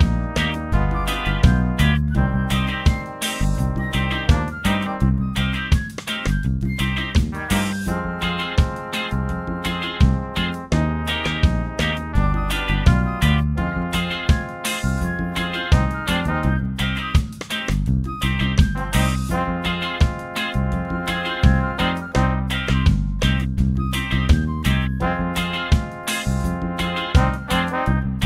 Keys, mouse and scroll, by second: 1.3 ctrl+d, 3.1 click, 4.4 ctrl+d, 7.1-8.8 drag, 9.2-10.6 drag, 11.9 click, 12.8 click, 13.6 shift+click, 15.1 click, 16.8 click, 18.0 click, 18.6 shift+click, 23.0 click, 24.6 click, 26.3 click, 27.5-28.2 drag.